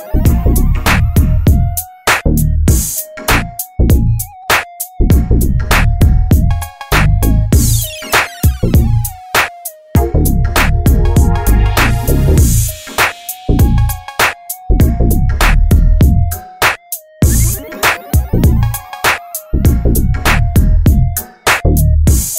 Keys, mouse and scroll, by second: 4.0 Tab, 5.8 click, 8.5 click, 13.8 click, 17.4-22.3 drag.